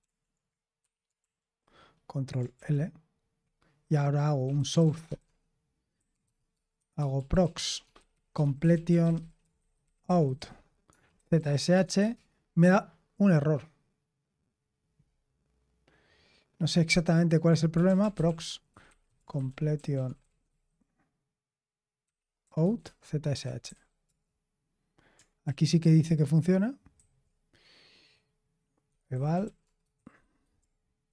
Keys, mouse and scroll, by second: 0.7 Escape, 2.5 ctrl+l, 4.1-12.1 typing, 17.4-20.9 typing, 22.1-24.1 typing, 25.4 ctrl+p, 26.9 ctrl+a, 28.6-31.1 typing, 31.0 ctrl+e.